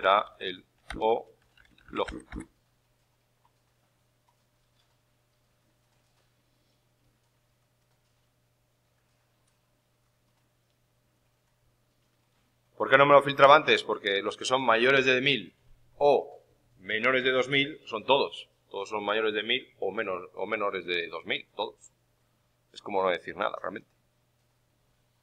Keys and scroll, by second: 0.0-2.7 typing.